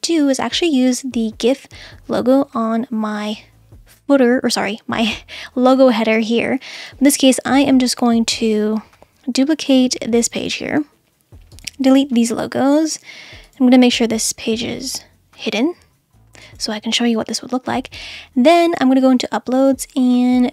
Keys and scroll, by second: 11.9 BackSpace.